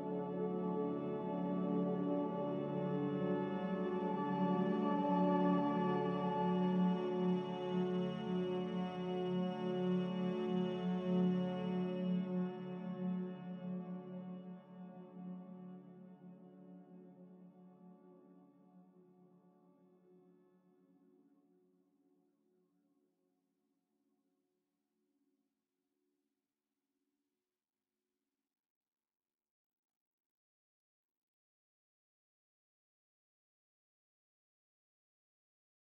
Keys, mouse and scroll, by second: 3.8 c, 6.7 click, 30.8 ctrl+z, 31.0 ctrl+z.